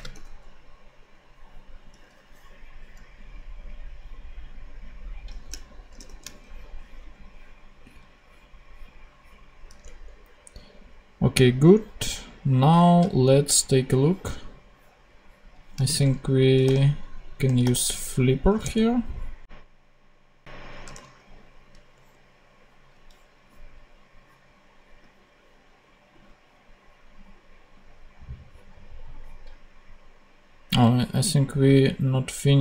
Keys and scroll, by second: 0.1 /, 5.9 shift+super+p, 9.8 super+Tab, 16.6 super+f, 17.0 typing, 18.5 Return, 20.8 super+Tab.